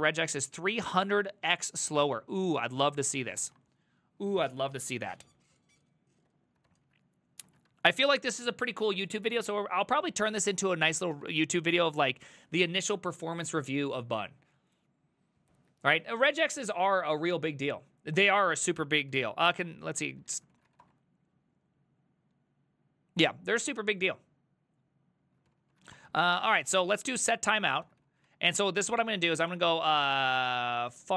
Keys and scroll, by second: 3.5 alt+{, 6.7 ctrl+c, 6.8 ctrl+c, 7.5 ctrl+a, 7.7 1, 9.8-11.8 typing, 19.1 ctrl+c, 19.7-21.3 typing, 25.5 ctrl+c, 25.6-31.1 typing.